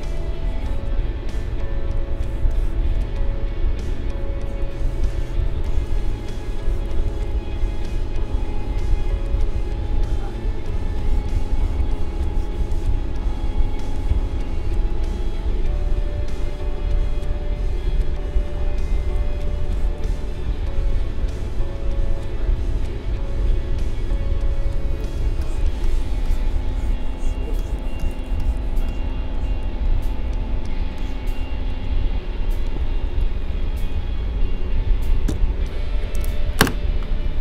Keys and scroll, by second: 4.8 space, 19.5 space, 25.2 space.